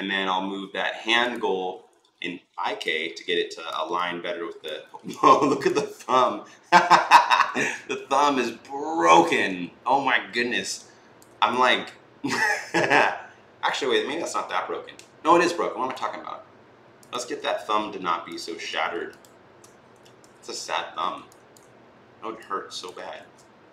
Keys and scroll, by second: 1.9 e, 20.0 r, 23.0 ctrl+z.